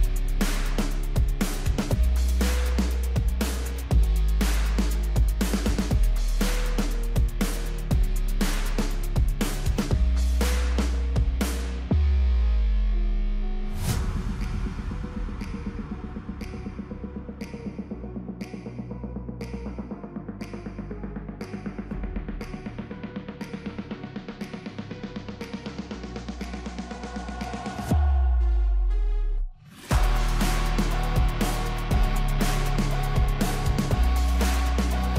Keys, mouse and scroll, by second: 0.0-3.1 drag, 3.7-4.6 scroll down 2, 4.6-7.6 middle drag, 7.9-10.3 drag, 11.4-14.4 middle drag, 15.3-18.3 drag, 18.8 click, 22.5-25.3 drag, 25.3-27.1 middle drag, 27.1-28.1 scroll up 2, 28.1-31.1 scroll up 1, 32.7-34.2 middle drag, 34.2 click.